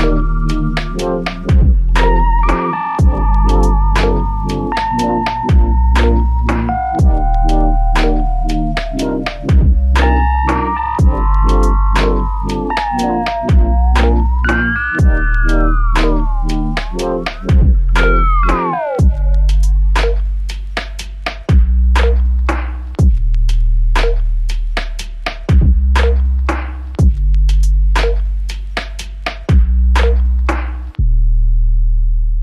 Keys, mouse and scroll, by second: 0.4 alt+click, 1.6 alt+click, 2.7 ctrl+click, 15.1 shift+click, 16.8 shift+click, 18.1 alt+click, 18.8 ctrl+click.